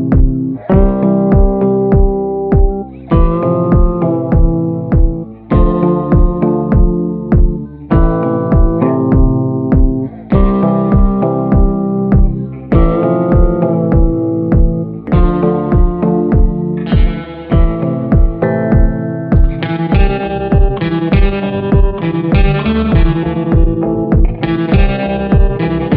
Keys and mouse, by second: 1.8 shift+middle click, 2.4 middle click, 3.9 ], 4.1 click, 4.6 click, 5.1 [, 5.3 click, 5.8 ctrl+z, 6.0 ], 6.1 click, 6.7 ctrl+z, 7.0 click, 7.8 ctrl+z, 9.8 ], 9.8 ], 9.9 click, 10.8 ctrl+z, 11.0 ], 11.2 click, 11.6 [, 11.9 [, 12.0 click, 13.3 middle click, 14.5 middle click, 15.2 middle click, 16.7 ], 16.9 click, 17.5 ctrl+z, 17.6 ], 17.8 click, 18.1 [, 18.3 [, 18.4 click, 19.0 ctrl+z, 19.4 click, 20.5 click, 20.6 middle click, 21.4-21.9 [, 21.9 click, 22.5 ], 22.6 ], 22.8 click, 24.1 middle click, 25.1 shift+middle click, 25.7 middle click.